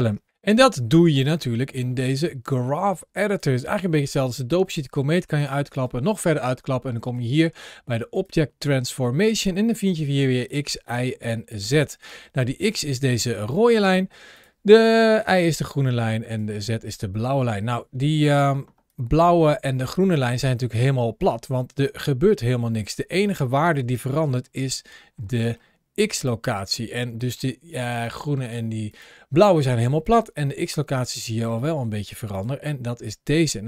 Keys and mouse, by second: 1.6-3.3 drag, 5.3 click, 8.0 click, 10.3 click, 10.7 click, 11.1 click, 11.6 click, 13.5 middle click, 15.1 middle click, 16.8 middle click, 17.2 click, 18.3 ctrl+alt+shift+4, 18.5 ctrl+shift+a, 25.3 middle click, 26.7 middle click, 27.9 click, 28.8 click, 31.5 middle click, 32.2 click.